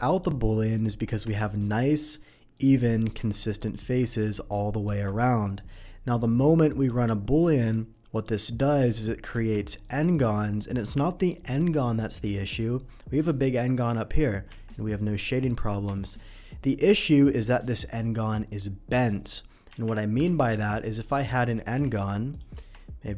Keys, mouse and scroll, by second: 0.1 click, 1.1 Tab, 1.9 middle click, 2.5 click, 3.1 click, 3.5 click, 4.9 Tab, 6.7 click, 7.6 click, 8.1 click, 9.4 Tab, 9.8 click, 10.1 middle click, 12.2 middle click, 13.1 click, 13.6 middle click, 14.5 Tab, 16.2 middle click, 16.9 click, 17.2 middle click, 17.7 middle click, 19.6 middle click, 19.7 Tab, 20.2 shift+a, 21.1 click, 21.3 middle click, 21.8 g, 21.9 y, 22.2 g, 22.3 click, 22.5 Tab.